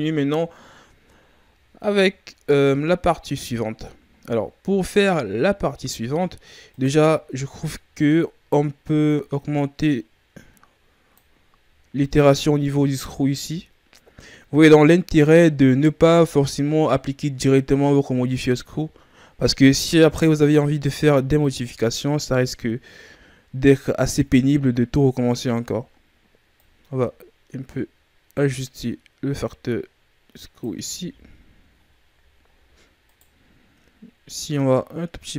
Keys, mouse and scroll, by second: 2.4-4.1 ctrl+scroll down 1, 4.1-4.9 ctrl+scroll up 2, 4.9-5.9 ctrl+scroll up 7, 6.7 right click, 7.0-7.6 shift+scroll up 2, 7.6-9.0 scroll up 1, 9.0 click, 20.2-24.5 drag, 26.5 click, 30.9 a, 31.2-32.4 scroll down 7, 32.4-33.0 scroll up 8, 33.0-34.2 right drag, 34.2 shift+click.